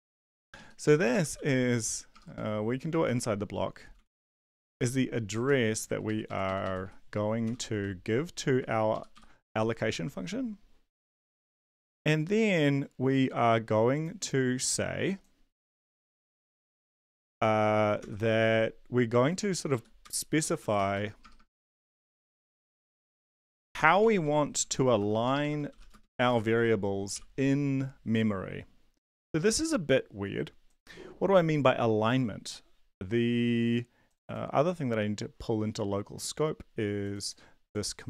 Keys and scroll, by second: 0.1 ctrl+x, 0.4 Down, 0.5 Down, 0.8 End, 1.1 Return, 1.1-5.0 typing, 5.4 Home, 6.0 ctrl+Right, 6.6 Right, 7.5 End, 7.5 r, 7.8 ;, 8.5 Down, 8.9 Up, 9.1 End, 9.4 Return, 17.3 shift+Left, 18.0 ctrl+c, 20.0 Right, 20.0 Return, 20.1-27.1 typing, 29.3 ctrl+b.